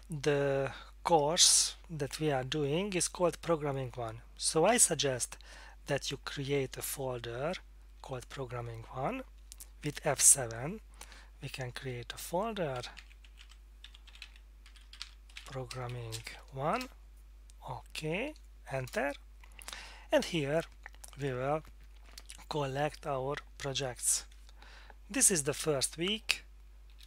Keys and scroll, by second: 11.8 F7, 12.8-17.2 typing, 18.6-19.4 typing, 26.9 F7.